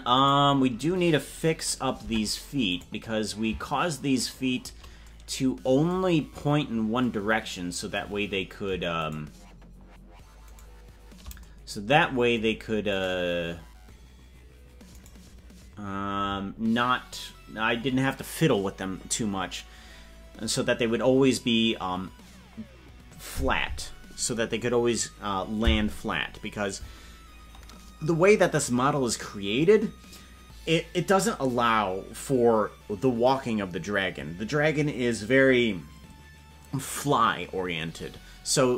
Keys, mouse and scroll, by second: 2.2 ctrl+Tab, 3.1-3.6 right drag, 4.7 shift+right click, 6.7 scroll up 1, 7.2 scroll up 3, 9.4-9.8 shift+right drag, 11.0 shift+right click, 13.4-38.7 right drag.